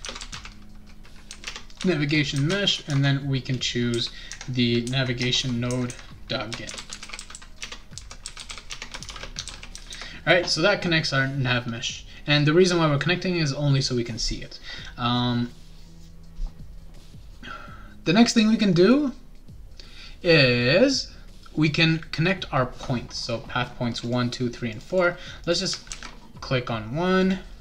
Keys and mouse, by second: 0.0-0.8 typing, 1.4 Tab, 2.5-3.9 typing, 5.2 BackSpace, 5.4 ;, 6.4-9.6 typing, 24.0 click, 24.7 click, 24.9 click, 25.4 click, 25.6 click, 25.9 ctrl+c, 27.2 click.